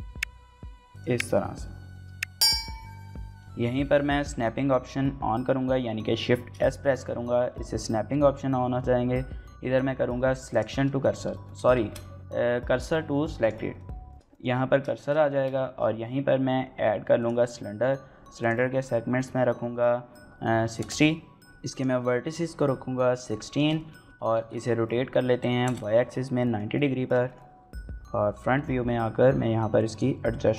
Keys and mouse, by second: 0.9 click, 1.1 Tab, 1.9 shift+middle click, 2.5 Tab, 2.9 shift+middle click, 3.3 middle click, 6.3 shift+s, 11.3 ctrl+z, 11.8 shift+s, 14.1 shift+middle click, 14.3 middle click, 15.0 shift+middle click, 15.6 shift+a, 18.4-21.3 drag, 23.2 shift+middle click, 23.6 middle click, 24.1 x, 24.8 y, 25.1 KP_9, 25.5 KP_Enter, 26.2 click, 26.8 shift+click, 27.0 click, 27.5 KP_1, 28.5 s, 29.5 right click, 30.0 s.